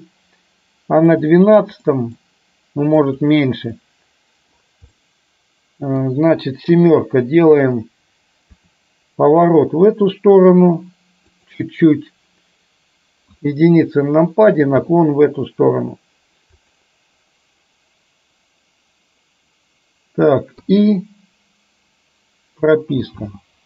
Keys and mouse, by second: 1.2 click, 1.9 middle click, 3.0 click, 3.9-4.6 middle drag, 5.0-6.1 middle drag, 6.9 KP_7, 8.6 r, 13.4 KP_1, 14.9 r, 20.6 i, 23.1 space.